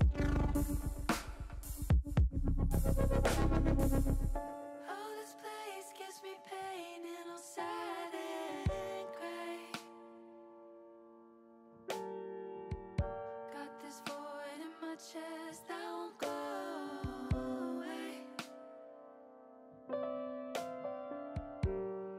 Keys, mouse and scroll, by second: 1.9-3.0 drag, 4.2 ctrl+z, 7.8 click, 9.5-10.9 drag, 13.4-15.3 drag, 16.2 middle click, 17.6 click, 18.5 Tab, 20.7 click.